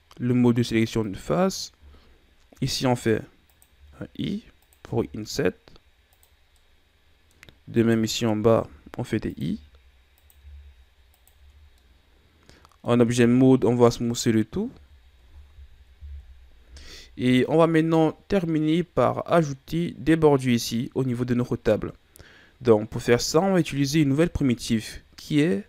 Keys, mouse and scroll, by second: 1.1 right click, 2.6 i, 3.8 i, 4.9 i, 6.6-7.8 middle drag, 7.8 right click, 8.7 i, 9.6 i, 11.4 Tab, 11.8-13.2 middle drag, 13.2 w, 14.8 a, 16.1 KP_1, 23.6 shift+a.